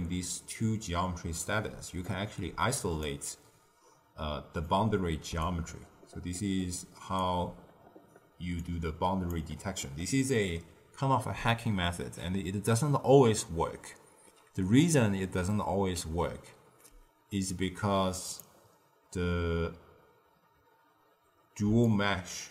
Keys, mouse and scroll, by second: 1.4 d, 2.4 d, 2.9 d, 2.9 d, 3.0-4.6 drag, 4.6 d, 5.3 d, 5.4-7.2 right drag, 7.2 d, 7.8 d, 8.5 click, 18.2 click, 21.6 d, 21.8-22.5 drag.